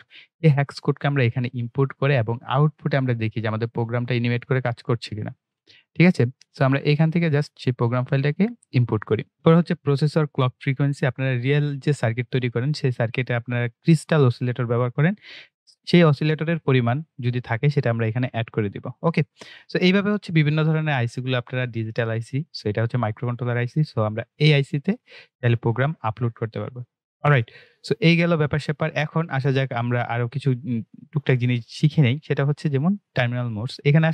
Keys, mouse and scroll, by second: 16.2-19.5 drag, 23.8 click, 33.3 click.